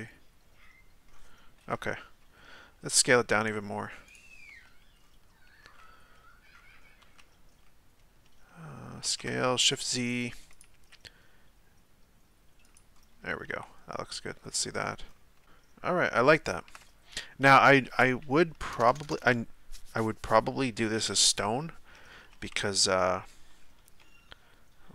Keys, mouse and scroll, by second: 1.6 KP_7, 2.4 z, 2.8-3.5 scroll up 4, 3.5 z, 4.1 right click, 4.6 z, 5.0-7.0 scroll up 1, 7.0 s, 10.8 g, 12.9-13.6 scroll up 2, 13.6 z, 13.9-14.5 middle drag, 14.5-15.4 scroll down 9, 15.4-17.1 middle drag, 17.1 right click, 18.7 ctrl+KP_Add, 18.9 ctrl+KP_Add, 21.0 KP_7, 22.5 z.